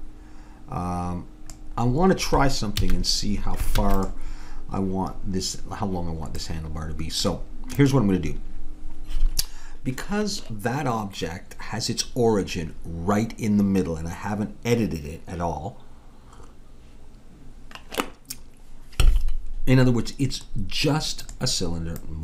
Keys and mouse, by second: 1.8 middle click, 2.8 a, 3.8 ctrl+s, 7.8-9.5 drag, 21.2-22.2 drag.